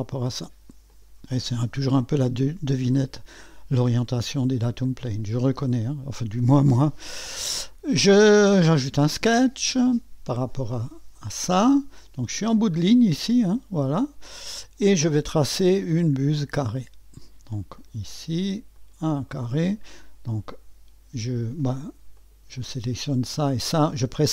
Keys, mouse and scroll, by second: 0.9 click, 2.1 click, 3.9 click, 4.7 click, 8.7 click, 9.9-10.4 scroll up 1, 10.7 right click, 11.8 right click, 16.3 click, 17.8 click, 18.8 click, 19.3 middle click, 22.1 click, 23.4 click.